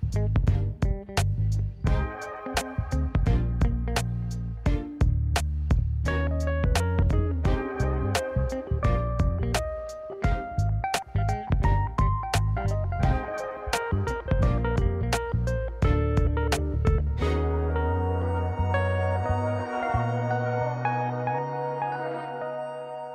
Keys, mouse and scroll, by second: 0.0 n, 0.6-1.0 scroll up 2, 1.0 scroll down 1, 1.2 alt+z, 1.9 click, 2.6 click, 3.6 click, 4.2 click, 4.8 click, 5.3 s, 6.4 click, 7.4-8.5 drag, 9.0 KP_Decimal, 9.8 click, 11.0 scroll down 1, 11.4 alt+z, 11.6 middle click, 12.4 click, 13.7 click, 14.0 middle click, 14.8 KP_1, 15.4 scroll up 2, 16.3 shift+s, 17.6 shift+a, 19.8-23.1 drag.